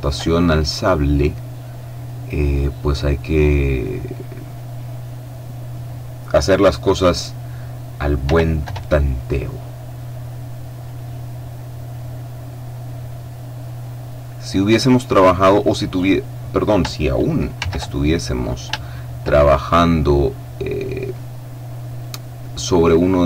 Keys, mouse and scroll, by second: 0.6-1.1 scroll up 1, 1.1 click, 2.0 middle click, 3.0-4.4 middle drag, 5.6 middle click, 8.2 r, 8.6 y, 10.8 click, 12.5 middle click, 13.8 scroll down 1, 14.1 middle click, 15.0 middle click, 15.7 click, 17.5 shift+c, 18.1-18.7 shift+scroll up 1, 18.7 shift+middle click, 20.2-22.4 drag, 22.8-23.2 drag.